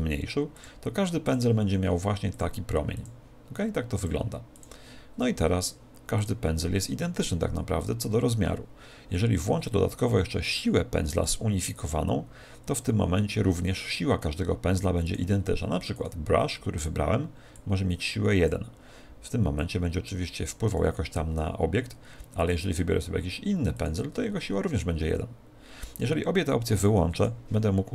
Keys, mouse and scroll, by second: 0.5-7.4 drag, 11.1 click, 15.0 click, 17.5 click, 19.5 click, 22.3 click, 26.7-27.9 drag.